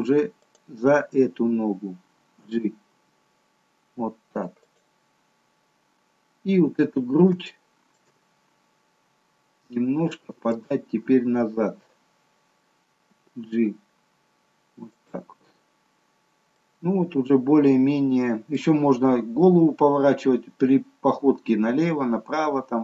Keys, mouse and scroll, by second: 0.5 click, 2.5 g, 5.6-6.0 scroll down 1, 6.3 scroll down 3, 6.6-7.4 scroll up 1, 7.4 scroll up 1, 7.5 shift+middle click, 8.3-9.6 scroll up 2, 13.1 g, 16.1-16.7 scroll down 3, 16.7 middle click, 22.7-22.8 scroll down 2.